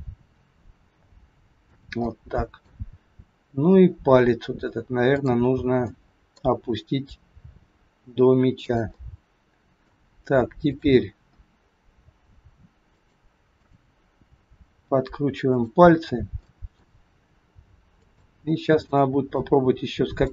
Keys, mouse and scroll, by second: 0.2 r, 2.1 middle click, 3.9-5.1 scroll up 3, 5.1 click, 5.9 middle click, 6.5-7.0 scroll down 2, 7.3 r, 8.8 middle click, 10.7 click, 11.9 r, 13.6 click, 14.3 r, 16.3 scroll up 1, 16.5 middle click, 17.9 click, 18.8 middle click, 19.6 r.